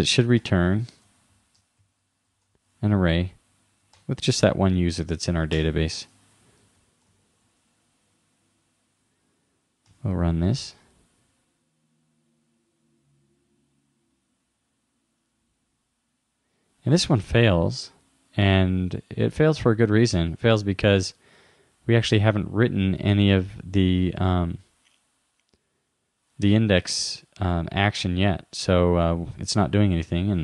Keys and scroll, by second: 0.5 shift+9, 1.9 shift+2, 4.0 super+Right, 7.1 shift+-, 9.9 super+r.